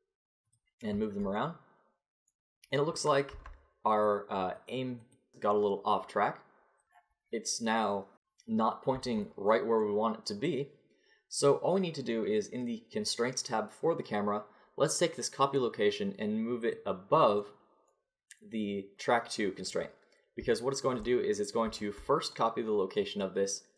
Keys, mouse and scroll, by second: 3.3 Tab, 6.9-9.5 middle drag, 9.5-18.9 drag, 18.9-20.5 middle drag, 20.5 click.